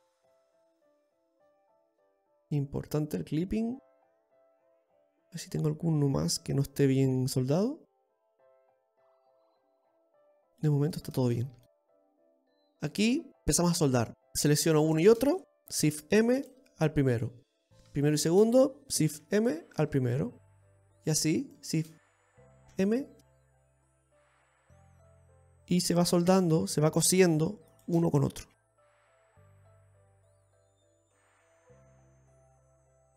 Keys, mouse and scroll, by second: 1.0 click, 2.8-3.7 scroll down 5, 3.7 middle click, 5.1-5.9 scroll up 5, 5.7 middle click, 11.6 scroll down 1, 11.8-12.2 scroll up 4, 12.4 shift+middle click, 12.9-13.4 scroll up 1, 13.4 scroll down 4, 13.6 scroll up 1, 14.1 right click, 15.5 shift+right click, 16.5 alt+m, 18.3 right click, 18.9 shift+right click, 19.8 alt+m, 20.8 middle click, 21.8 right click, 22.2 shift+right click, 23.2 alt+m, 24.9 middle click, 25.4 shift+middle click, 26.6 right click, 27.0 shift+right click, 27.8 right click, 28.5 shift+right click, 29.3 alt+m, 29.9 middle click, 31.3 shift+right click, 32.7 alt+m.